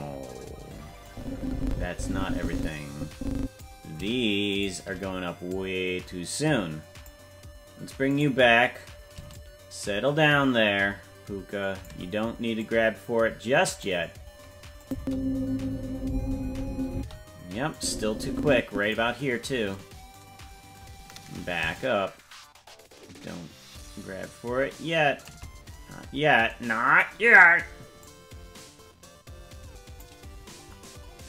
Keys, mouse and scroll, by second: 1.0-3.6 drag, 4.6 shift+right click, 5.5-7.1 drag, 8.2 right click, 9.3-11.9 shift+drag, 12.6-13.9 drag, 14.8 click, 14.9 space, 16.9 space, 17.7-18.9 drag, 21.7-25.3 shift+drag, 28.0-30.0 drag.